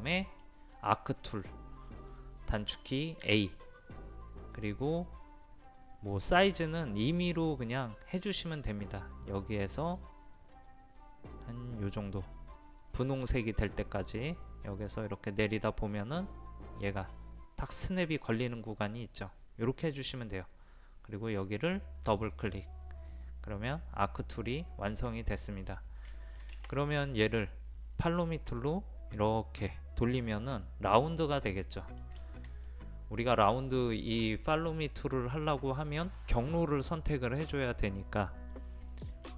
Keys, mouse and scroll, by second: 3.2 a, 4.8-8.8 scroll up 1, 9.8 click, 12.2 scroll up 1, 22.1-23.4 drag, 25.1-25.5 scroll down 1, 26.1-32.7 shift+middle drag, 38.1-39.3 scroll down 1.